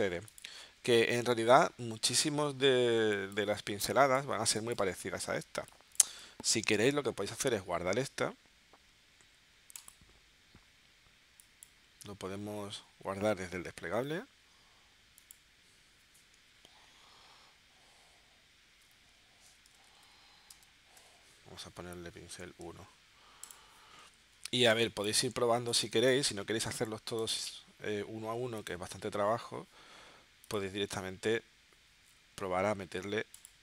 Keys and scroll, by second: 3.0 space, 3.9 space, 5.4 space, 18.8 shift+p, 19.5 i, 20.5 space, 21.0 0, 24.8 space, 25.7 space.